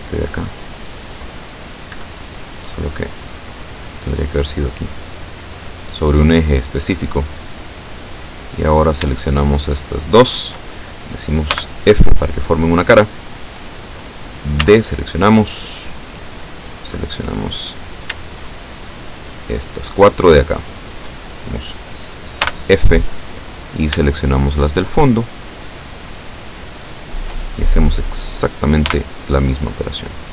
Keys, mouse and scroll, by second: 2.0 Escape, 3.6-7.5 drag, 7.7-9.1 middle drag, 9.6 shift+right click, 10.1 shift+right click, 11.6 f, 12.8-13.8 drag, 14.7 a, 15.3 scroll up 2, 16.9 click, 17.9 right click, 18.8 shift+right click, 19.9 shift+right click, 20.7 shift+right click, 22.5 f, 23.7 right click, 24.6 shift+right click, 25.7 shift+right click, 26.9 shift+right click, 29.0 f, 29.7-30.3 drag.